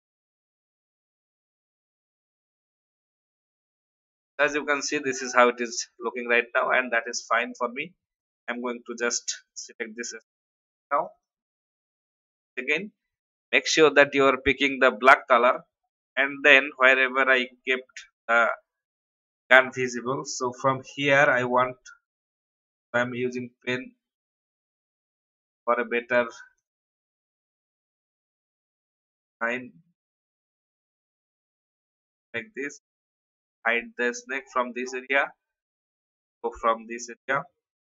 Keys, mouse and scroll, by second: 2.7 alt+scroll down 1, 3.3 alt+scroll down 2, 4.6 alt+v, 4.7 click, 17.4 alt+scroll up 1, 20.7 n, 21.4 alt+scroll up 1, 22.7 p, 23.6 click, 30.1 ctrl+z, 30.6 click, 33.6 alt+scroll down 1, 34.3-35.0 scroll up 1, 35.6 click, 36.4 alt+scroll up 1.